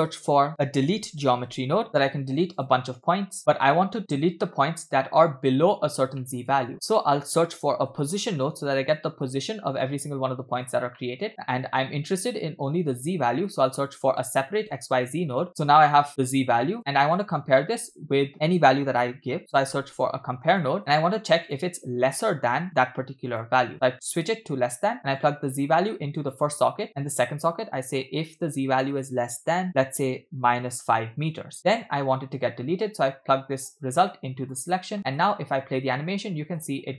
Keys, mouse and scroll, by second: 3.1 click, 3.4 middle click, 3.9-4.9 scroll up 1, 6.2 middle click, 6.6 shift+a, 11.0 middle click, 13.1 shift+a, 16.1 drag, 16.6 click, 17.8 shift+a, 21.0 scroll up 1, 21.5-23.5 drag, 23.7 click, 25.2 click, 25.4-26.4 drag, 26.9-31.0 drag, 31.6 middle click, 33.1-34.7 drag, 35.0 scroll down 2, 35.2 space, 35.8-36.6 shift+middle drag.